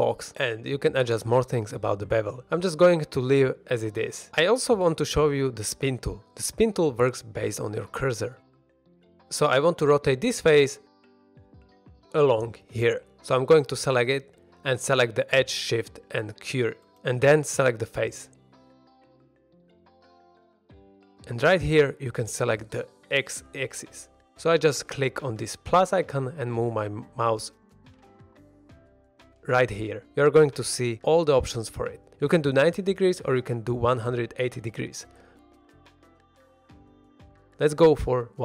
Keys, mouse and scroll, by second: 0.7-1.9 shift+drag, 3.0 shift+click, 3.9 shift+middle click, 3.9 scroll up 1, 6.2 click, 9.7 3, 10.9 shift+middle drag, 11.6 2, 11.9 click, 12.5 shift+s, 13.5 3, 14.0 click, 14.8-15.5 scroll up 2, 15.3 2, 15.5 click, 15.8 middle click, 16.2-16.9 scroll up 1, 17.2 shift+s, 18.7 scroll down 1, 19.1 shift+middle drag, 19.5 scroll down 1, 19.7 middle drag, 20.4 3, 20.6 click, 24.3 click, 25.5-27.9 drag, 28.9 shift+middle drag, 32.0 click, 33.4 click, 35.4 scroll down 1, 35.6-35.9 middle drag, 36.4 click, 37.2 click.